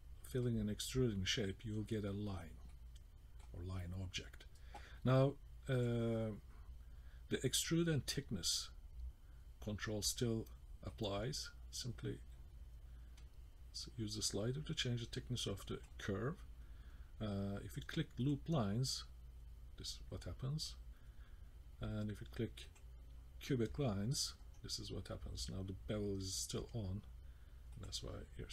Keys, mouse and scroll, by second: 2.7 middle click, 5.8 click, 10.9 click, 18.3 click, 22.7 click, 24.0-24.5 scroll down 2, 24.4-25.2 scroll up 3, 25.9-26.5 scroll down 1, 26.7-27.8 scroll down 5, 27.8 click, 28.3 scroll up 1.